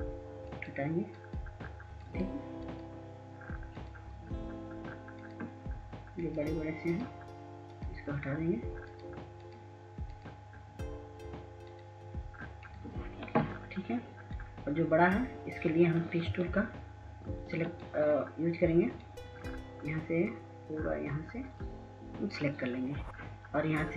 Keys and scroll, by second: 16.5 ctrl+s, 16.9 ctrl+s, 17.1 ctrl+s, 17.5 ctrl+s, 17.6 ctrl+s, 17.6 ctrl+s.